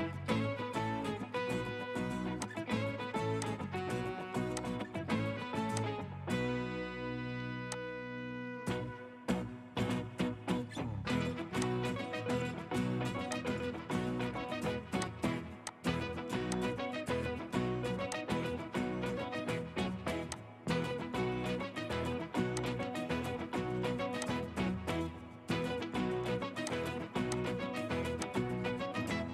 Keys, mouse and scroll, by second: 8.6-9.0 scroll down 1, 17.3-18.2 scroll down 1, 21.5 scroll down 1, 23.1 scroll up 1.